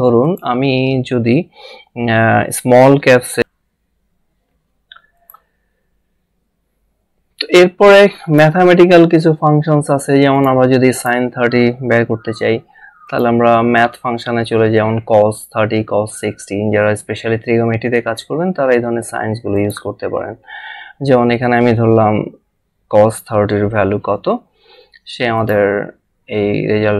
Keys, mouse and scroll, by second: 3.4 a, 4.2 z, 5.1 click, 8.2 click, 10.3 click, 13.0 click, 19.5 click, 23.3 3, 25.4 click.